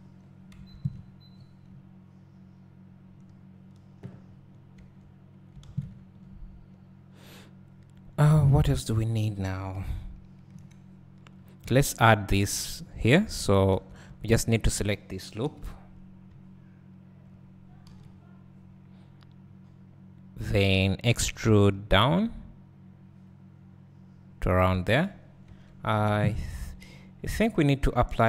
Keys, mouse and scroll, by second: 0.2-1.3 scroll down 1, 1.3 scroll up 1, 4.3-4.9 scroll up 2, 5.0 Tab, 5.6 alt+a, 6.2 Tab, 8.4 scroll down 1, 9.8 KP_1, 10.5 KP_3, 13.5 click, 13.8 Tab, 14.6 alt+click, 15.4 KP_Decimal, 17.9 KP_1, 21.3 e, 26.9 Tab, 27.8 `.